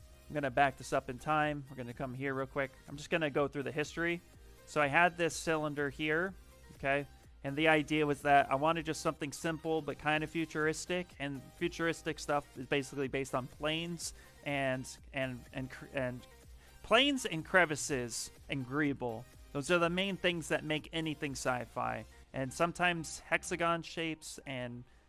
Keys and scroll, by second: 0.8 f, 1.7 ctrl+z, 4.5 f, 5.4 f.